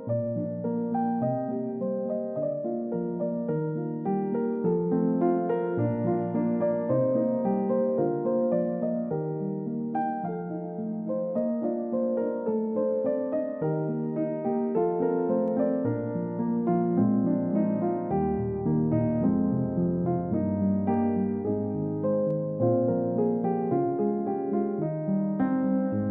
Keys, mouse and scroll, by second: 3.6 middle click, 5.5 middle click, 6.0-8.3 scroll down 1, 8.3 scroll up 1, 10.1 middle click, 12.5 scroll down 1, 12.8 middle click, 21.7 scroll down 1, 22.4 middle click, 22.8-26.1 scroll down 1.